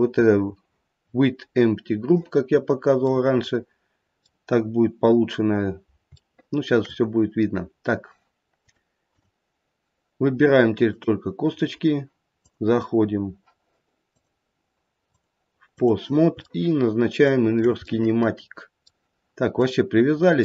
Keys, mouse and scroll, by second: 2.6-3.1 scroll down 1, 3.1 middle click, 4.0 middle click, 4.6-5.0 scroll down 1, 5.0-5.6 scroll up 3, 5.6-6.0 scroll down 1, 6.2 shift+middle click, 6.9 shift+middle click, 8.6 click, 10.8 click, 12.4 click, 14.1 click, 15.1 click, 16.4 shift+middle click, 17.5 shift+middle click, 17.8 middle click, 19.6 middle click.